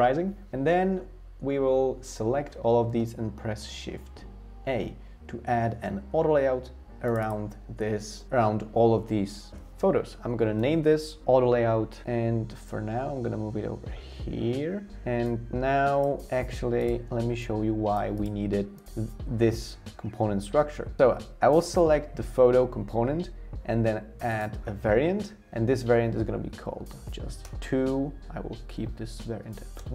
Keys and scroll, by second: 4.6 shift+a, 12.0 typing, 27.0 2, 27.4 Return, 29.4 1, 29.8 Return.